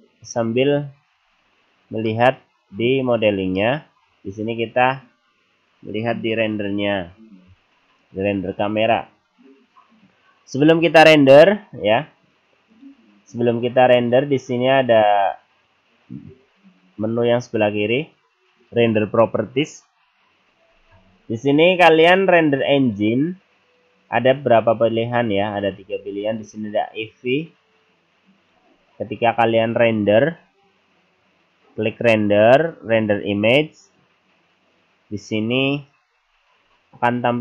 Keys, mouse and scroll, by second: 1.4-1.7 scroll down 3, 2.1 middle click, 2.8-3.6 scroll up 3, 3.6 middle click, 4.1-4.5 scroll up 1, 12.9 click, 13.5 click, 14.0 click, 22.8 click, 32.4 click.